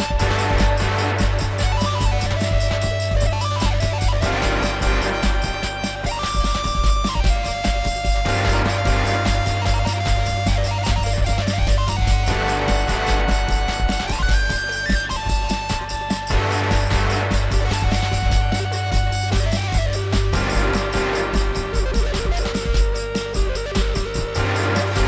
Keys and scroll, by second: 4.3 alt+c.